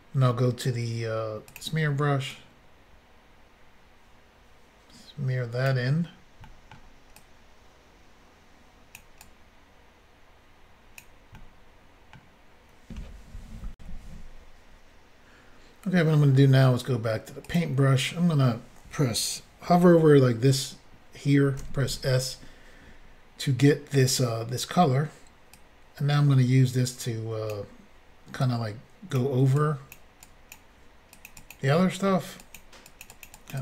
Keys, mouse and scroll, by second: 1.5 click, 1.6 click, 2.3 click, 6.5 middle click, 9.0 click, 9.2 click, 11.4 middle click, 13.8 Insert, 17.5 click, 17.5 click, 21.6 s, 25.5 click, 28.4 click, 29.6 click, 30.2 click, 31.1 click, 31.3 click, 31.4 click, 31.5 double click, 31.8 middle click, 32.4 double click, 32.6 double click, 32.9 double click, 33.0 double click, 33.1 double click, 33.2 double click, 33.3 double click, 33.5 double click.